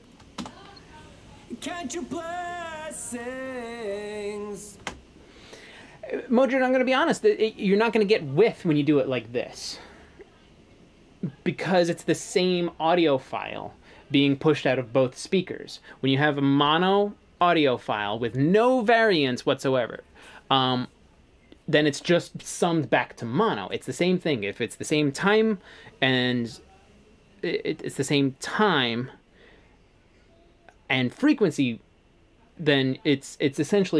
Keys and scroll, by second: 4.9 space.